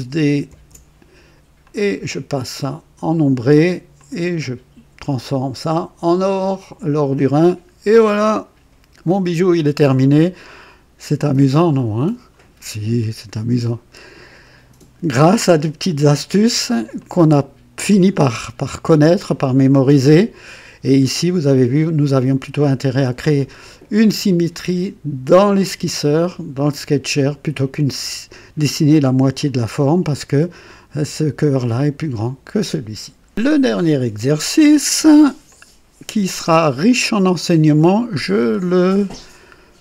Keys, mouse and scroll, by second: 0.5 ctrl+d, 1.6 ctrl+click, 2.6 click, 4.0 click, 5.0 click, 6.1 click, 6.9 click, 7.9-10.1 drag, 10.6-14.6 drag, 16.9-18.0 drag, 18.3 middle click, 22.0 click, 22.7 scroll down 2, 33.3 click, 35.4-39.8 drag.